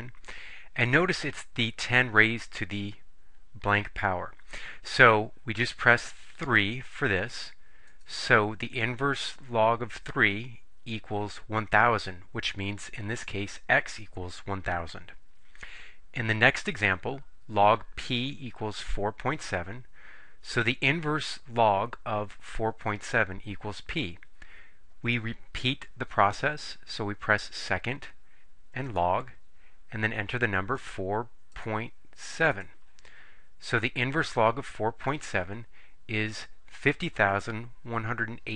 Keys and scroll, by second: 6.6 3, 8.0 Return, 30.9 4, 31.6 ., 32.6 7, 33.8 Return.